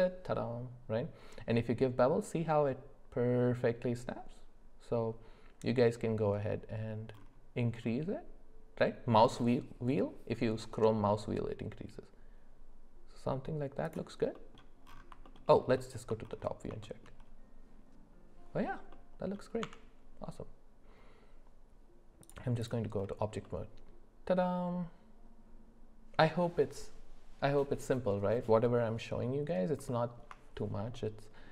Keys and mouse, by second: 14.3 middle click, 15.2 alt+middle click, 15.5 alt+middle click, 15.8 alt+middle click, 16.8 shift+middle click, 18.9 middle click, 19.6 Tab, 22.6 click, 23.4-26.2 middle drag, 29.9 shift+middle click, 30.9 middle click.